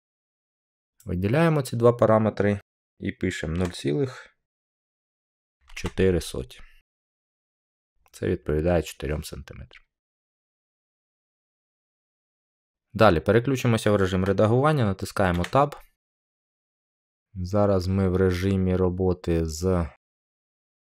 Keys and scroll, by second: 3.5 0, 4.8-5.6 typing, 7.3 Return, 15.2 Tab.